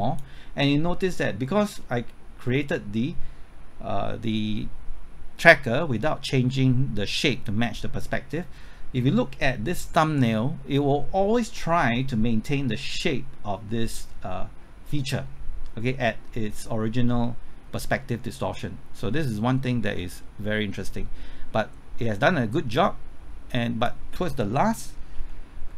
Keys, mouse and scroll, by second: 25.2-25.7 typing.